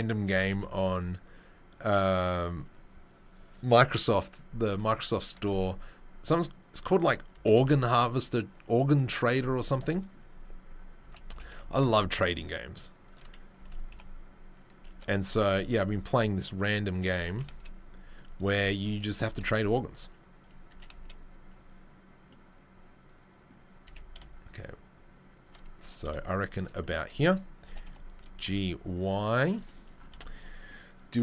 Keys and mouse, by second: 5.3 ctrl+r, 7.3 s, 11.3 g, 13.5 s, 14.9 3, 17.3 s, 19.2 a, 19.4 s, 20.7 s, 23.8 s, 25.8 s, 27.6 g.